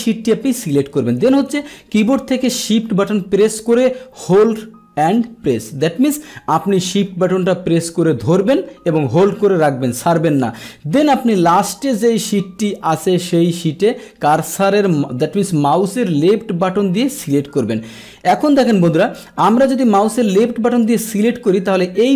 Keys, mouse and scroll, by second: 17.2 shift+click, 19.0 shift+click.